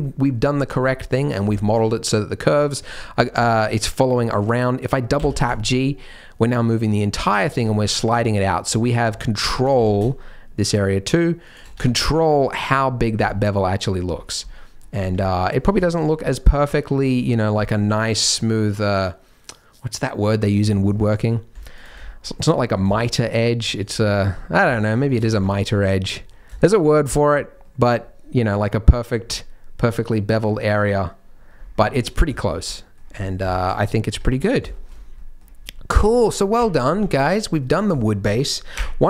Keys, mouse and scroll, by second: 0.0 shift+middle click, 0.0 scroll down 2, 0.4 shift+middle click, 0.8-1.4 scroll down 1, 1.4 scroll down 1, 1.5 shift+middle click, 2.6 shift+middle click, 2.8-3.4 scroll up 6, 3.4 shift+middle click, 4.1-5.1 scroll up 1, 5.1 scroll up 1, 5.1 g, 7.6 middle click, 8.8 alt+click, 9.2 middle click, 9.6 g, 11.7 Tab, 12.0 middle click, 13.2 middle click, 13.7 middle click, 14.1-14.5 scroll down 4, 14.4 middle click, 15.0 Tab, 15.2 middle click, 15.7-16.7 shift+scroll up 3, 15.8 shift+middle click, 16.5 middle click, 16.7 middle click, 20.9 middle click, 21.7 alt+click, 22.0 shift+middle click, 22.5 middle click, 22.9 shift+middle click, 23.2 scroll up 1, 23.3 middle click, 23.8 g, 25.3 Tab, 25.5 middle click, 25.7 scroll up 1, 25.9 middle click, 26.6 shift+middle click, 26.9 middle click, 27.6 middle click, 27.7 shift+middle click, 28.6 middle click, 28.7 shift+middle click, 29.3 middle click, 29.4 shift+middle click, 31.5 scroll down 4, 31.7 middle click, 32.3 shift+middle click, 32.6 middle click, 33.1 scroll down 2, 33.5 shift+middle click, 34.6 Tab, 34.7 middle click, 34.9 scroll down 1, 35.1 middle click, 36.5 KP_1, 36.9 KP_3, 37.6-37.9 scroll down 5, 38.7 KP_1.